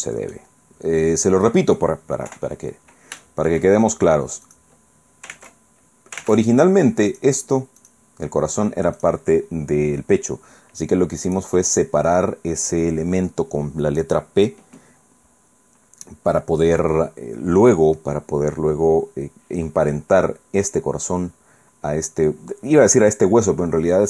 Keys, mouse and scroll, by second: 0.7 scroll up 2, 1.1 scroll down 2, 1.5 click, 2.3 KP_1, 3.2 shift+click, 4.5 click, 5.3 ctrl+Tab, 6.4 ctrl+Tab, 7.1 click, 7.8 right click, 9.0 right click, 11.3 right click.